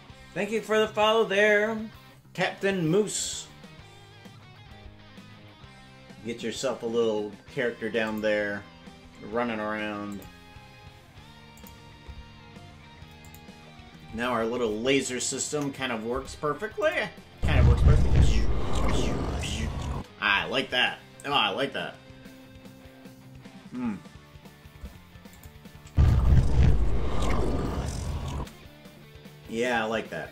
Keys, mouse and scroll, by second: 3.2 click, 8.0-9.2 drag, 10.2 click, 11.5-12.6 drag, 13.3 click, 15.5 KP_0, 16.9 click, 17.3 space, 25.3 click, 25.8 space, 28.4 space.